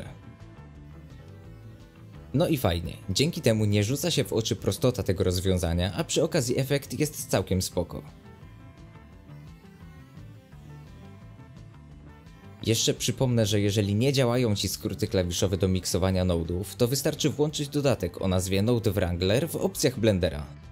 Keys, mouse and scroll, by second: 1.2-3.5 drag, 3.5-5.6 middle drag, 5.6-10.1 drag, 10.4 ctrl+shift+click, 11.0-11.4 scroll down 2, 11.4 shift+middle click, 11.7 scroll up 1, 11.7 shift+middle drag, 12.0 space, 12.3 click, 15.0 space, 15.3 click, 17.8-20.7 drag.